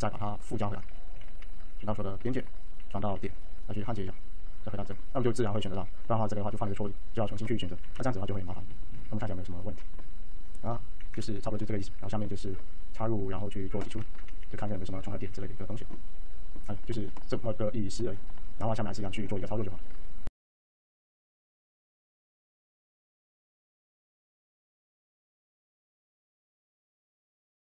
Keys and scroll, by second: 0.7 1, 1.0 ctrl+a, 1.8 ctrl+a, 2.7 alt+1, 7.5 t, 8.6 ctrl+a, 10.7 t, 11.7 alt+a, 13.6 ctrl+z, 13.9 1, 14.9 alt+e, 15.1 alt+f, 17.7 alt+e, 19.9 alt+a, 27.3 alt+q.